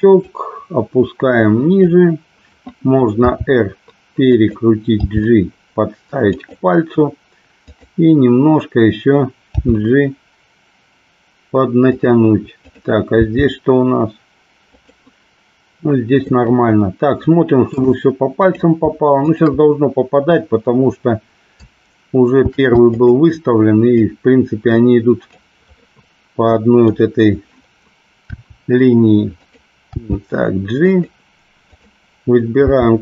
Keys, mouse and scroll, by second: 0.4-2.0 drag, 3.2 r, 4.4 click, 5.1 g, 6.4 click, 7.8 click, 9.6 g, 12.0 click, 13.3 g, 14.7 click, 16.4-17.8 middle drag, 18.5 click, 19.4 shift+click, 22.5 shift+d, 23.0 click, 24.0-25.4 drag, 25.9-27.0 middle drag, 28.4 r, 29.9 g, 31.0 click, 31.8 click, 32.6 g.